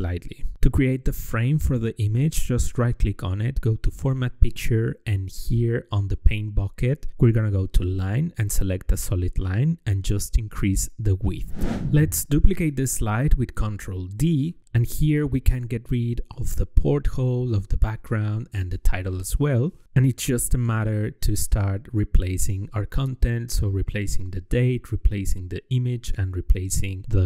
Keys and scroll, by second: 12.9 ctrl+d, 16.3 Left, 17.3 BackSpace, 21.0 Left, 21.4 KP_0, 24.9 Left, 26.0 ctrl+v.